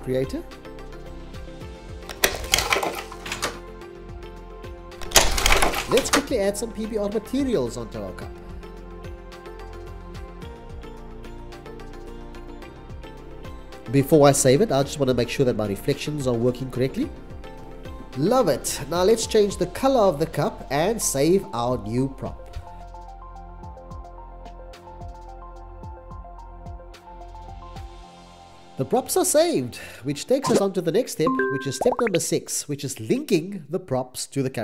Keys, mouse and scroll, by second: 3.4-5.7 typing, 3.6 Right, 3.7 Right, 3.8 Right, 4.3 Right, 5.7 right click, 6.9 typing, 7.2 Return, 12.2 c, 14.9 c, 15.1 x, 15.2 x, 22.2-25.5 typing, 25.5 Escape, 26.6-29.6 typing.